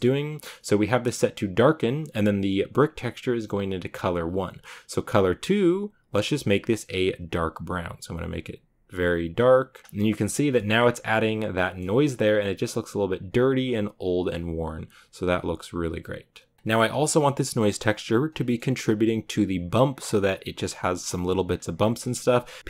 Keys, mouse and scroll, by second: 2.3 click, 6.3 click, 9.8 click, 9.9 shift+middle click, 10.1-11.4 scroll up 5, 10.4 shift+middle click, 11.4 scroll up 1, 11.5-12.0 shift+middle drag, 12.0-14.5 scroll down 2, 14.5 click, 16.5 shift+middle click, 17.1 click.